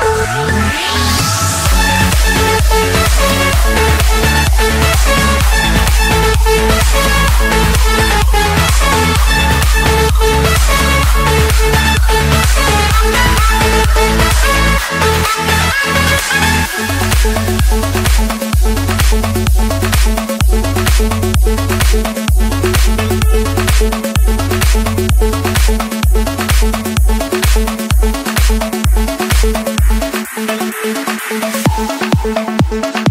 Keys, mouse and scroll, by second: 0.4 Escape, 0.7-1.0 scroll, 2.2 click, 4.1-5.7 typing, 7.3 Return, 8.0 click, 8.8-9.2 scroll, 10.8 right click, 11.8 right click, 12.7-13.9 drag, 14.4-15.6 drag, 16.8-18.0 middle drag, 16.8-17.7 scroll, 17.7 Escape, 18.9 click, 22.0 click, 25.4 click, 26.4-27.5 drag, 28.2-30.3 drag, 30.8-31.9 drag, 32.2-33.1 drag.